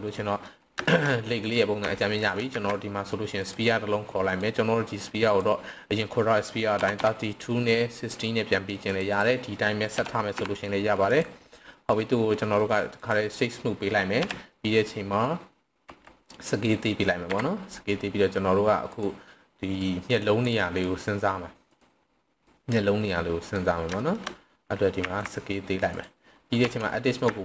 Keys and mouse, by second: 0.1-0.4 middle drag, 0.9 shift+middle click, 1.1 middle drag, 1.8 Tab, 2.5 shift+a, 5.4-9.0 drag, 9.1-11.2 drag, 11.7 middle click, 12.6 right click, 14.1 KP_1, 15.9 s, 16.5 click, 17.1 KP_7, 19.9-20.4 drag, 20.5 click, 22.5-23.5 drag, 24.0 shift+middle click, 25.0 s, 25.9 click, 26.6 Tab, 27.3 z.